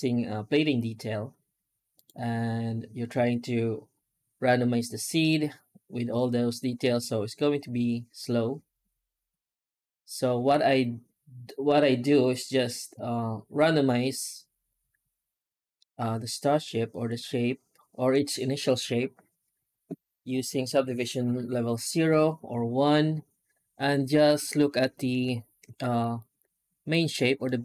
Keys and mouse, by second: 25.7 shift+middle click, 26.0-26.7 middle drag, 27.3-27.6 middle drag.